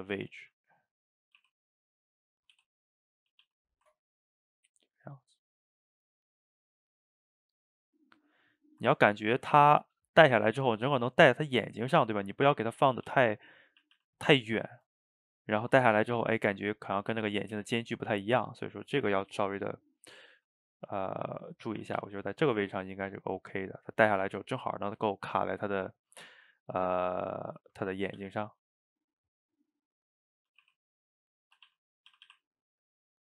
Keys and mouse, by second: 0.4 g, 1.4 r, 2.6 g, 3.3 a, 3.4 a, 3.7-7.4 ctrl+middle drag, 9.0-9.3 ctrl+middle drag, 9.3 click, 11.4-13.1 middle drag, 13.1 g, 13.9 a, 14.0 a, 14.1-17.1 ctrl+middle drag, 17.1 ctrl+z, 17.6 ctrl+z, 18.6-20.4 middle drag, 20.4 g, 21.3-21.9 middle drag, 21.9 a, 22.0 a, 22.3-25.1 middle drag, 25.1 shift+right click, 25.4-27.1 ctrl+middle drag, 27.1 click, 27.3-28.2 middle drag, 28.2 g, 28.9-30.7 middle drag, 30.7 r, 32.1 a, 32.6 click, 32.8-33.3 middle drag.